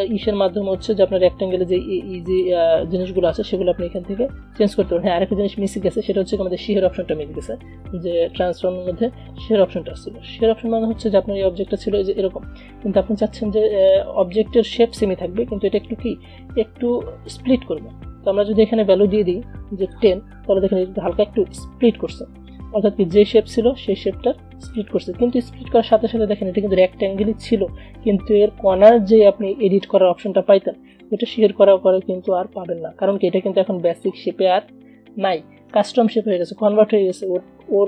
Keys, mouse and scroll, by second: 2.3 click, 7.3 click, 10.9 click, 12.8-13.6 alt+scroll down 2, 13.6-14.6 alt+scroll down 1, 18.6 click, 24.8 click, 24.9 click, 27.5 ctrl+z, 31.1-37.8 drag.